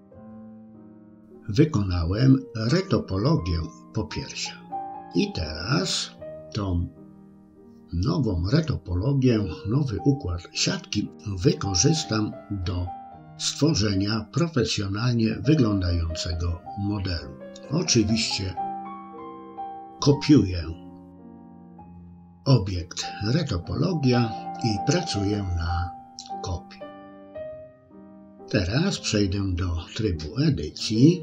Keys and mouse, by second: 3.4-4.7 drag, 10.0-13.1 right drag, 14.5-16.1 right drag, 18.2 click, 19.9 click, 21.4 middle click, 23.1 KP_3, 26.9 Tab.